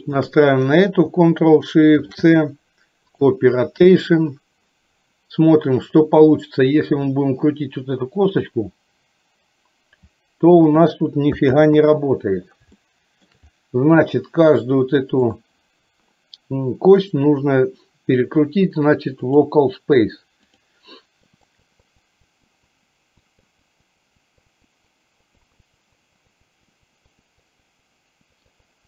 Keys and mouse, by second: 0.1 shift+click, 8.4 r, 11.5 ctrl+z, 12.8 shift+middle click, 15.2 click, 17.0-19.5 drag, 20.6 click, 21.6 click, 22.0 click, 22.6 click, 23.2 click, 23.9 click, 24.2 click, 24.6 click, 24.9 click, 25.4 click, 26.0 click, 26.3 click, 26.8 click, 27.2 click, 27.6 click, 27.8 click, 28.4 click.